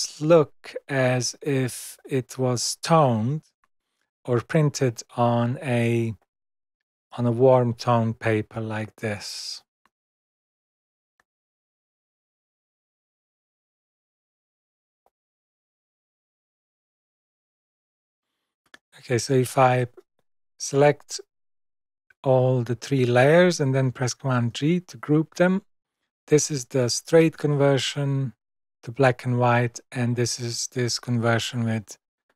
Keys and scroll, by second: 10.0 super+-, 16.5 super+-, 24.2 super+g.